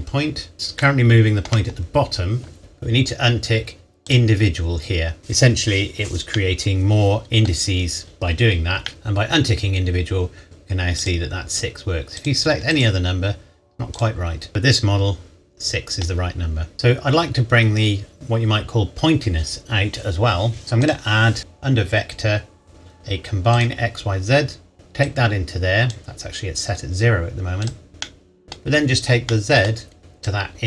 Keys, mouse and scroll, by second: 1.1 shift+middle click, 4.0 click, 6.3 middle click, 8.0-8.8 scroll down 1, 8.8 shift+middle click, 11.0 click, 14.5 middle click, 16.7 click, 20.8 click, 23.5 click, 28.0 middle click, 28.6 scroll down 1, 29.3 middle click, 30.4 click.